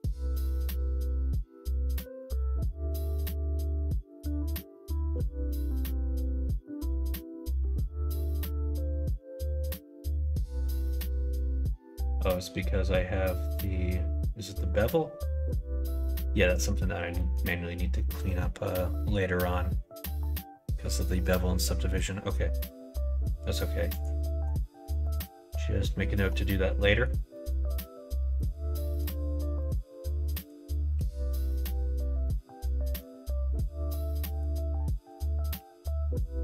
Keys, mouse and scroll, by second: 0.6 middle click, 1.9-3.0 middle drag, 5.0 h, 5.5 middle click, 6.2 middle click, 6.8 click, 7.3 middle click, 7.5 h, 8.0 middle click, 8.8 ctrl+z, 9.3-10.8 middle drag, 17.1 middle click, 17.8 middle click, 18.9 middle click, 23.8 click, 26.7 middle click, 27.2 middle click, 28.3 middle click, 28.7 shift+middle click, 29.1 middle click, 29.5 click, 30.2 click, 30.8 q, 32.1 click, 32.2 middle click, 32.7 middle click, 34.2 click, 35.0 click.